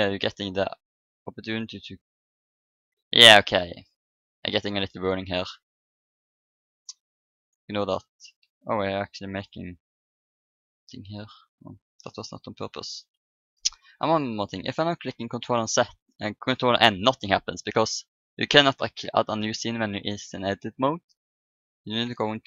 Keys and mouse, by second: 1.9-3.8 drag, 4.4-6.0 drag, 6.7-7.8 drag, 8.5-10.8 drag, 15.2 ctrl+n, 20.4 click, 22.0 ctrl+n.